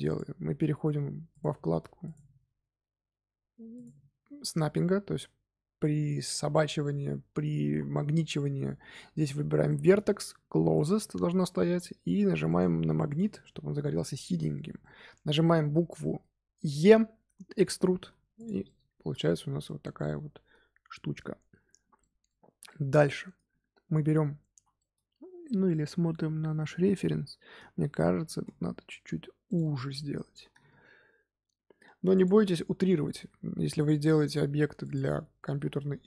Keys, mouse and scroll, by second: 1.2 click, 3.7-6.8 drag, 13.0 click, 13.6 scroll up 2, 14.0-15.5 middle drag, 15.5-15.9 scroll up 1, 15.9-17.9 middle drag, 17.9 e, 18.6 middle click, 19.4 Tab, 19.6-23.3 middle drag, 23.3 Tab, 24.5 l, 24.7-27.7 middle drag, 28.2 s, 29.5 middle click, 30.4 s, 32.2-33.9 middle drag, 33.9 s, 35.0 middle click, 35.5 scroll up 1, 35.7 scroll down 2.